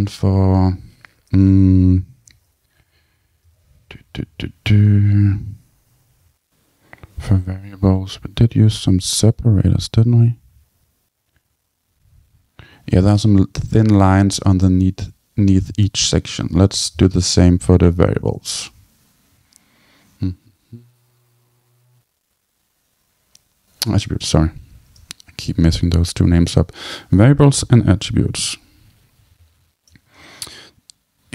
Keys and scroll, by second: 2.8 Down, 3.2 Return.